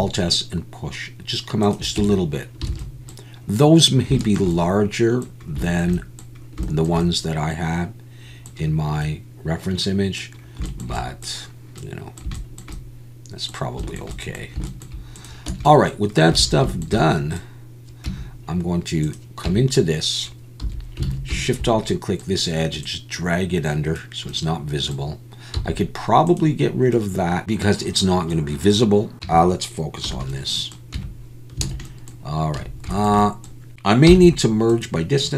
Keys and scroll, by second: 2.0 Tab, 2.7 alt+a, 15.5 Tab, 16.4 alt+a, 18.1 Tab, 20.6 2, 21.1 alt+a, 29.1 ctrl+z, 29.2 Tab, 30.0 /, 30.9 Tab, 31.7 alt+a, 32.6 a, 34.6 m.